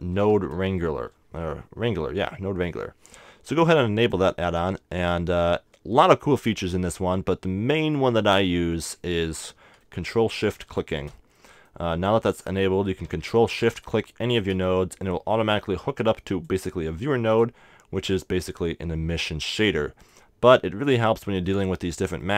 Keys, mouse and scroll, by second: 8.8-10.7 middle drag, 10.7-13.7 drag, 10.7 right click, 11.3 right click, 11.5-19.0 middle drag, 14.6-16.5 drag, 19.3-22.0 drag, 20.9-22.0 right drag, 22.0 middle click.